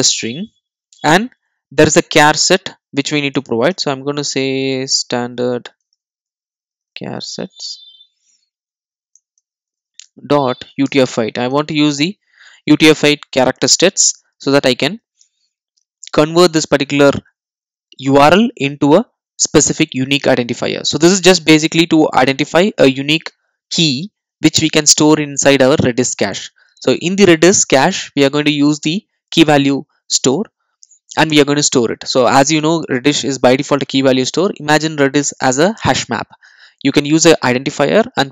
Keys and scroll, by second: 0.0 Return, 9.3 Return.